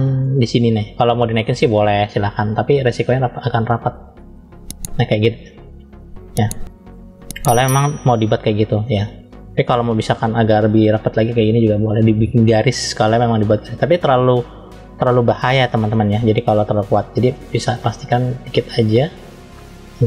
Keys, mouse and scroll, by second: 1.2 click, 3.0 click, 8.6 ctrl+z, 9.7 click, 10.8 click, 14.0 ctrl+z, 17.1-18.5 drag, 19.8 f.